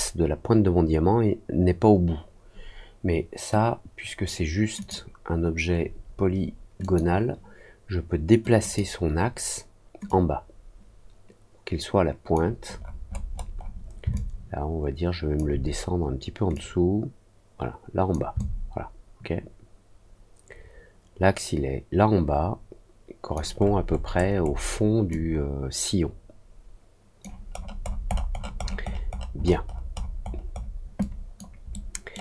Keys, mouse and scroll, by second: 4.7 click, 6.7 click, 8.5 click, 10.0-12.3 drag, 12.7 middle click, 13.0 middle click, 13.3 middle click, 14.1-15.3 alt+drag, 16.5-18.0 drag, 18.3-23.3 alt+drag, 23.5-24.0 alt+scroll up 2, 24.3 alt+scroll up 1, 25.0-27.1 alt+drag, 27.5-27.9 alt+scroll down 2, 28.0 alt+middle click, 28.3 alt+middle click, 28.5 alt+middle click, 28.8 alt+middle click, 29.0 alt+middle click, 29.3 alt+middle click, 29.6 alt+middle click, 29.9 alt+middle click, 30.2-30.7 alt+scroll down 2, 30.9 alt+click, 31.6 alt+middle click.